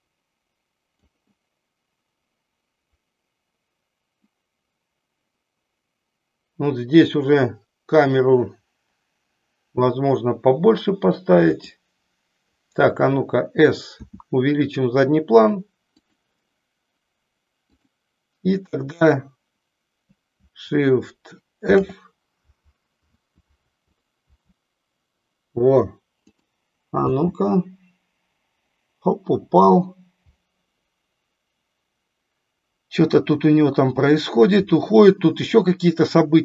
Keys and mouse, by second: 11.3 click.